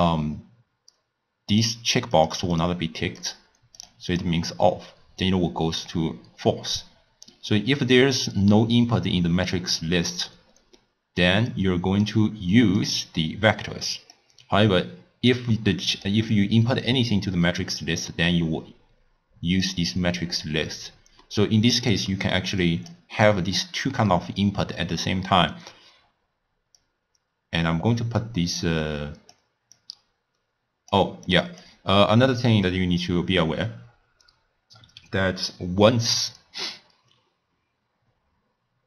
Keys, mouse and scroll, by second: 2.6 click, 3.2 click, 3.8 click, 4.1 click, 11.6-12.9 drag, 15.3 click, 17.7 click, 21.3-22.7 middle drag, 22.7 click, 23.3 click, 26.9-29.9 drag, 31.3 click, 32.0-35.0 middle drag.